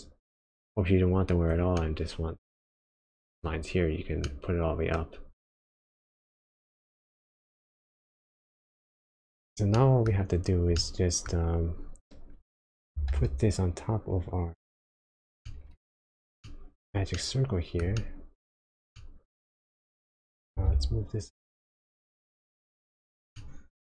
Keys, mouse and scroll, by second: 2.1 middle click, 4.2 middle click, 5.0-5.7 scroll up 1, 5.9 click, 8.5 click, 9.7 middle click, 10.4-10.8 scroll down 2, 10.8 middle click, 12.9 g, 15.4 middle click, 16.0 scroll up 1, 16.1 scroll down 1, 16.5 shift+middle click, 17.2 middle click, 18.0 shift+middle click, 19.0 middle click, 20.5 g, 23.4 middle click.